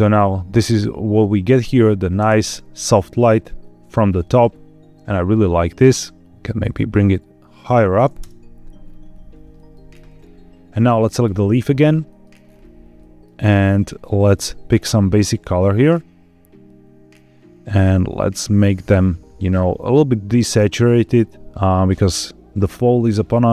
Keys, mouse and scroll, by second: 1.1 scroll down 2, 1.5 scroll up 1, 2.1 space, 2.5-3.0 scroll down 2, 3.5-3.8 scroll down 1, 3.8 middle click, 4.1 middle click, 4.1-4.9 scroll down 2, 4.9 g, 5.0 z, 7.5 click, 8.1 KP_0, 8.7-9.1 scroll up 4, 9.6 shift+middle click, 11.2 click, 11.9 middle click, 12.3-12.9 scroll up 3, 12.9 middle click, 14.2 click.